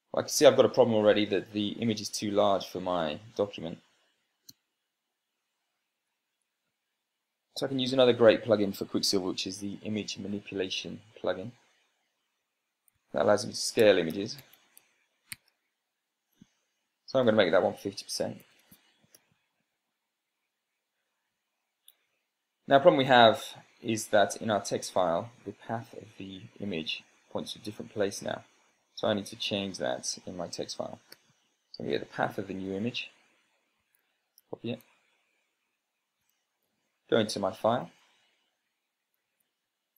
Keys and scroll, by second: 5.4 BackSpace, 7.6 super+space, 13.7 Tab, 14.7-15.7 typing, 16.2 Tab, 17.5-19.3 typing, 19.9 Return, 31.7-32.1 typing, 33.5 Return, 34.5 Tab, 35.3 super+c, 37.5 ctrl+p, 38.6 Down, 38.7 Down, 39.7 Tab.